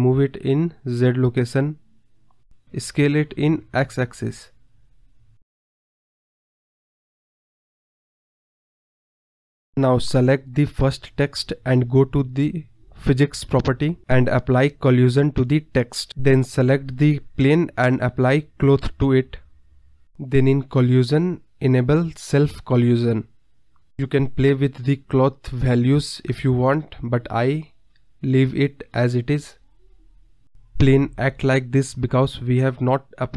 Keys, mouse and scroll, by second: 0.1 shift+a, 1.3-2.3 middle drag, 2.3-3.8 drag, 3.8-4.9 middle drag, 4.9 click, 5.9 scroll down 2, 5.9 middle click, 6.6 KP_7, 6.9-7.3 middle drag, 7.3 scroll up 1, 7.4 middle click, 8.1 click, 9.7-10.8 middle drag, 11.1 scroll up 3, 11.6 middle click, 12.5 click, 12.9-14.5 middle drag, 14.7 click, 15.4 click, 17.1 click, 18.0 scroll down 2, 18.1-19.7 middle drag, 20.2-22.5 scroll down 30, 22.5 click, 22.7-23.5 scroll down 6, 23.5 click, 25.3-27.0 scroll up 25, 27.0-28.3 scroll down 24, 28.3-29.9 drag, 30.1 KP_1, 30.9 click, 32.1 space.